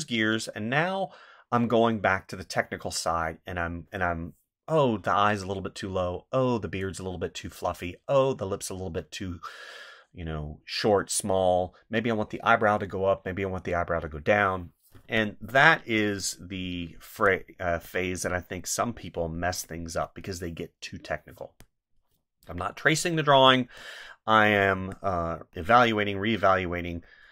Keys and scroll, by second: 14.9 space, 17.1 space, 19.5 space, 21.3 space, 24.8 space.